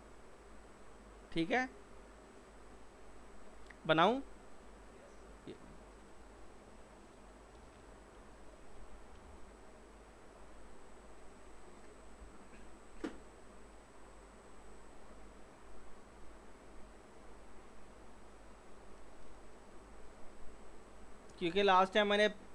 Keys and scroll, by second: 8.2 Delete, 8.8 f, 9.2 z, 12.3 typing.